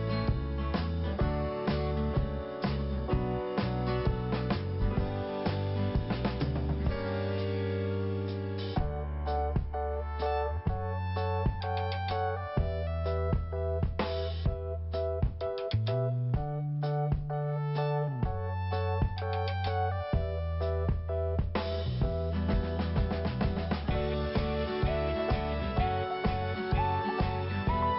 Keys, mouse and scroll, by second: 2.8 scroll down 1, 3.9 click, 5.1-5.5 scroll up 1, 6.7 scroll up 1, 7.9 click, 10.9 click, 14.6 click, 16.2 click, 18.6-19.4 scroll down 1, 19.5 click, 20.6-21.1 scroll up 1, 25.2 click.